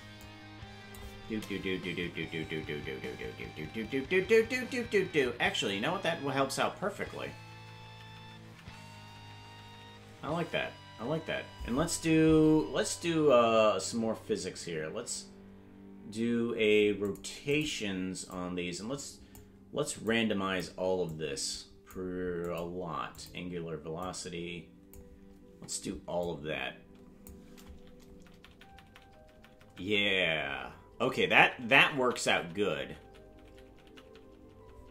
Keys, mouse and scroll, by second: 0.2 click, 1.8-2.4 Right, 2.6 Right, 2.8 Right, 3.0 Right, 3.2-3.7 Right, 3.9 Right, 4.2 Right, 4.4 Right, 4.6 Right, 4.8-10.4 Right, 10.6 Right, 17.0 click, 17.5 click, 18.3-19.3 drag, 20.0 click, 21.0 click, 22.4 click, 23.1 click, 24.0 click, 26.2-27.3 drag, 28.2 Right, 28.4-29.2 Right, 29.4 Right, 29.6-30.0 Right, 30.2 Right, 30.4 Right, 30.7 Right, 31.1 Right, 31.2 Right, 31.4-32.0 Right, 32.2 Right, 32.4 Right, 32.7 Right, 33.0 Right, 33.2 Right, 33.5 Right, 33.7 Right, 34.0-34.6 Right, 34.8 Right.